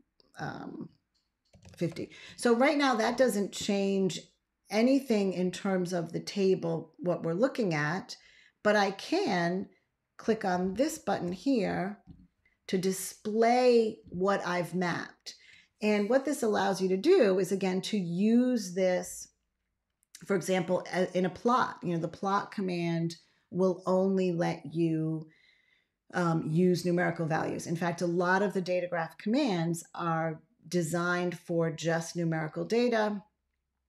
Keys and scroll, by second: 1.1-2.0 typing, 10.4 ctrl+a.